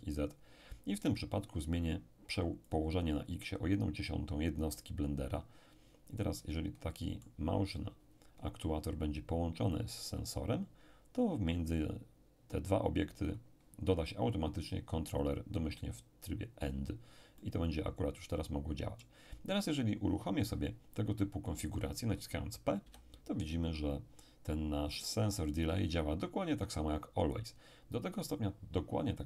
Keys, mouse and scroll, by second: 2.7 click, 6.2-8.2 middle drag, 9.7-14.2 drag, 16.7-20.0 drag, 17.4-20.0 middle drag, 22.8 p, 26.6 Escape.